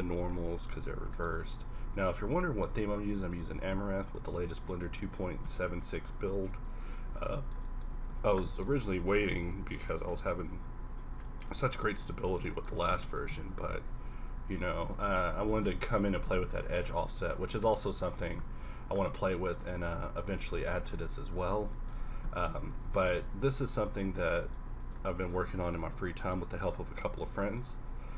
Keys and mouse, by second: 0.8 ctrl+r, 1.6 b, 2.6 ctrl+b, 3.5 g, 4.5 e, 5.3 s, 6.1 ctrl+Tab, 7.9 z, 9.0 z, 9.1 x, 9.8 a, 12.2 ctrl+r, 12.7 s, 13.7 ctrl+b, 15.4 g, 16.3 s, 17.7 click, 18.2 s, 20.5 ctrl+b, 22.0 g, 22.9 ctrl+Tab.